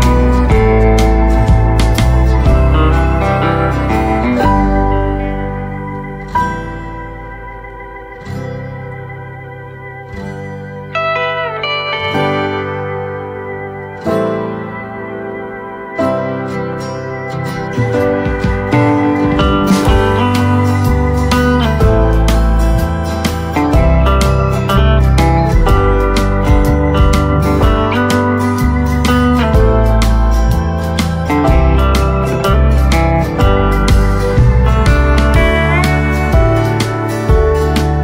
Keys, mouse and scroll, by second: 0.3 click, 0.5 right click, 1.0-1.4 scroll down 1, 1.4 right click, 2.0 click, 2.5-3.1 scroll up 1, 4.0-5.1 typing, 6.5 click, 9.7 right click, 12.3 space, 12.9 click, 16.0 right click, 18.0 click, 18.4 right click, 19.2 click, 22.5 scroll up 1, 22.9-27.2 drag, 30.2 right click, 30.7 click, 31.0 right click, 32.8 click, 33.1 right click, 34.1 ctrl+z, 34.6 click, 35.0 right click, 36.0 click, 36.4 right click, 37.6-38.0 drag.